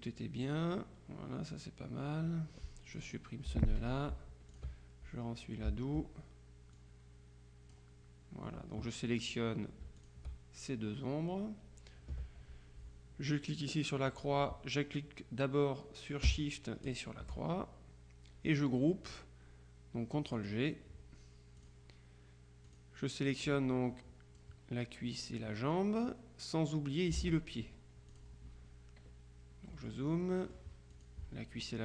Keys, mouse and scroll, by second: 3.0 click, 3.6 Delete, 4.6 ctrl+click, 6.8-8.3 drag, 10.1 shift+click, 17.0 shift+click, 20.4 click, 21.7 click, 22.8 click, 27.3 ctrl+z, 28.2 click, 29.9 click, 31.0 click.